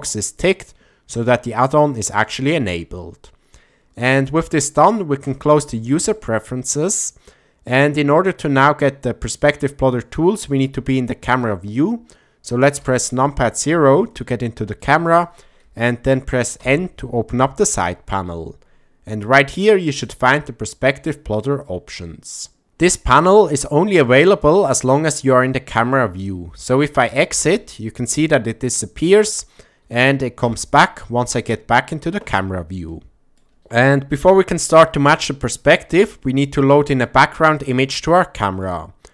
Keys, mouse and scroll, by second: 5.9 shift+middle click, 7.0-9.5 middle drag, 12.8 KP_0, 14.1-14.8 shift+middle drag, 16.6 n, 19.9 click, 27.3 KP_0, 32.9 shift+middle click, 38.1 ctrl+middle click.